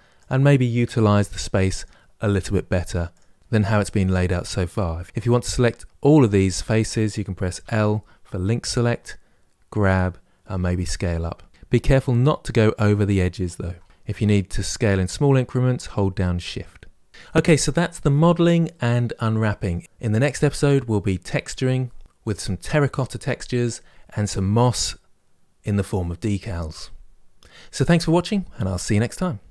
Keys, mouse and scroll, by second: 0.0 click, 0.8 g, 2.2 s, 3.4 click, 7.4 l, 8.5 g, 10.3 s, 13.5 s, 18.6-29.5 middle drag.